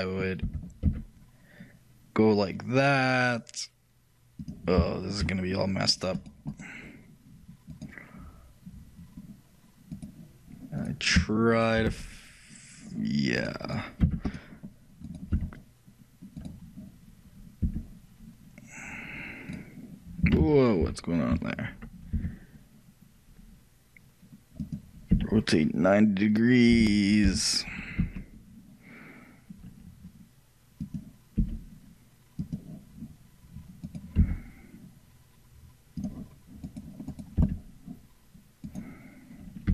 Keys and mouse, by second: 5.0-6.9 shift+middle drag, 12.0 f, 14.1 x, 15.5 e, 16.5-17.7 right drag, 17.7 e, 20.5 ctrl+z, 22.2 e, 37.5-39.7 right drag, 37.5 e.